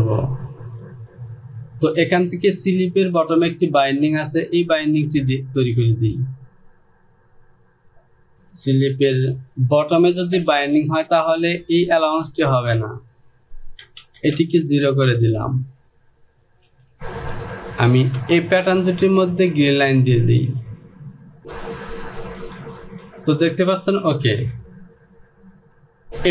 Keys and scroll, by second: 9.3 Home, 13.4 Down, 13.9 KP_0, 14.1 Down, 14.4 KP_0, 16.9 j, 18.2 Return, 25.8 j.